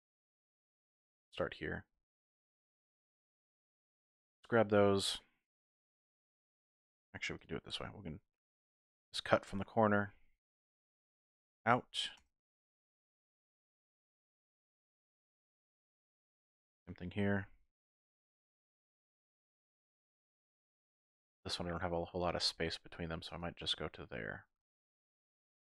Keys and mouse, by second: 0.6 shift+click, 2.0 shift+click, 2.0 typing, 4.0 shift+click, 7.6 k, 13.4 shift+click, 14.8 shift+click, 17.4 k.